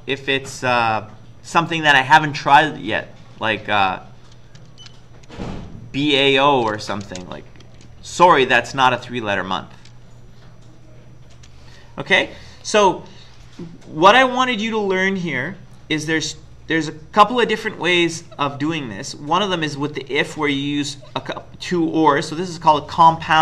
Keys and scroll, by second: 4.7-5.2 typing, 6.4 typing, 7.0 Return, 11.5 Return.